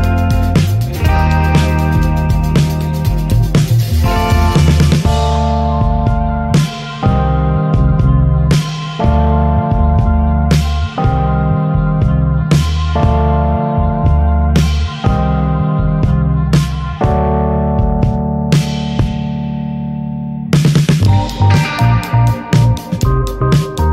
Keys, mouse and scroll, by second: 0.2 click, 1.2 scroll down 3, 1.4 Tab, 2.0 ctrl+1, 2.3 ctrl+2, 2.5 scroll down 6, 2.8-3.4 shift+middle drag, 3.4 ctrl+s, 3.9 click, 4.8-7.7 drag, 7.7 shift+middle click, 7.9 alt+z, 8.2 drag, 8.5-9.9 middle drag, 9.9-10.7 drag, 11.5 alt+middle click, 11.8 alt+middle click, 12.1 click, 12.3 Tab, 12.7-13.5 scroll up 9, 12.9 alt+z, 13.1 shift+middle click, 13.6 shift+middle click, 14.0 scroll up 5, 14.5 click, 14.7 s, 16.9 click, 18.1-18.6 scroll up 5, 18.3 shift+middle drag, 18.9 click, 19.4-20.0 shift+middle drag, 20.0 click, 22.4 click, 23.5 click, 23.8 click.